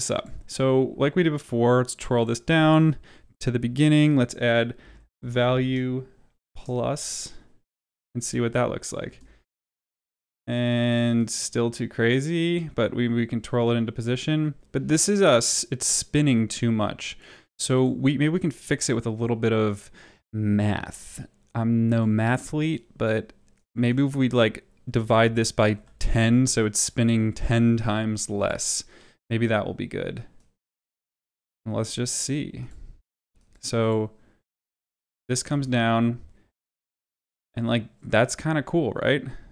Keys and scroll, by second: 3.2 Up, 4.5-5.9 typing, 9.0 space, 24.9-26.2 typing, 35.4 space.